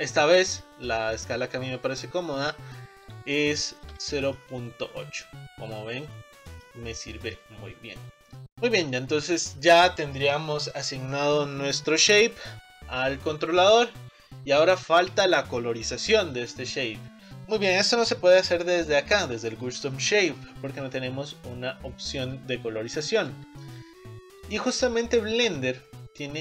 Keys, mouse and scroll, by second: 0.3-1.6 middle drag, 1.6-2.3 scroll up 2, 3.4-7.3 shift+middle drag, 7.3 click, 7.8-8.3 scroll down 4, 8.3 middle click, 8.6-8.9 scroll up 3, 8.9-12.9 middle drag, 23.2-26.4 drag.